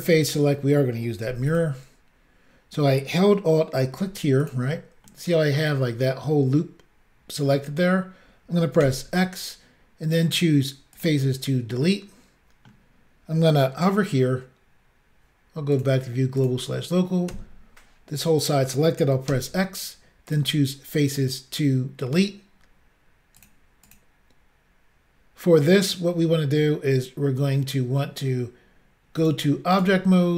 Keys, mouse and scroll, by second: 0.0 click, 1.5 alt+click, 1.6 alt+click, 4.4 click, 4.5 click, 5.1 middle click, 8.9 x, 11.0 click, 11.1 click, 11.8 middle click, 15.8 click, 15.8 click, 16.4 click, 16.5 click, 17.3 l, 19.3 x, 20.3 click, 20.4 click, 23.4 click, 23.5 click, 23.9 click, 24.0 click, 29.2 click, 29.3 click, 29.8 click, 29.8 click.